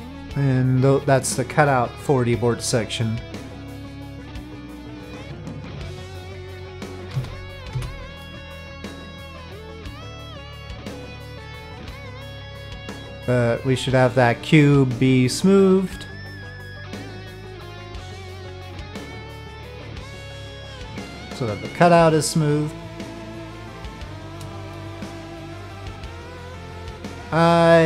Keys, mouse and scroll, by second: 7.1 z, 8.2 click, 9.9 click, 10.5-11.6 middle drag, 14.1 click, 15.3 click, 18.4 click, 18.8 click, 20.3 click, 20.9-23.5 middle drag, 24.0-24.4 shift+middle drag, 24.7-25.2 middle drag, 27.5-27.8 shift+middle drag.